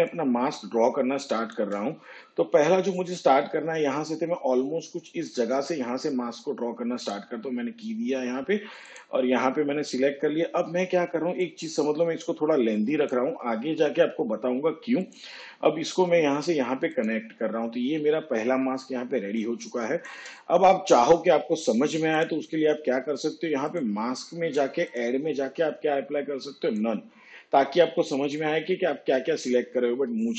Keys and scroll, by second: 18.7 space.